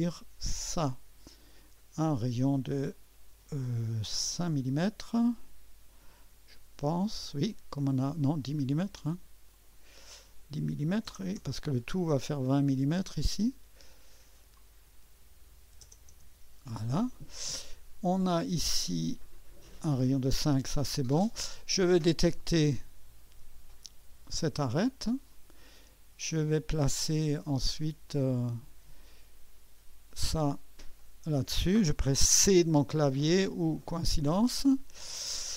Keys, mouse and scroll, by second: 1.7 click, 4.2-4.9 typing, 6.6 Return, 9.5 click, 10.6-11.5 typing, 13.3-15.7 drag, 15.7-16.1 typing, 19.4 click, 20.6 click, 22.4 click, 24.3 click, 26.5-27.1 drag, 28.1-29.7 drag, 30.1 click, 31.0 click, 33.8 click.